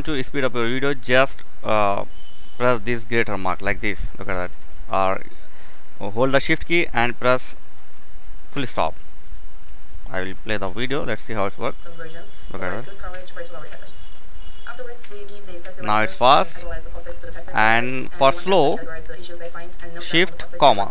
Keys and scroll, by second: 2.9 shift+., 8.0 shift+., 12.5 shift+., 20.2 shift+,.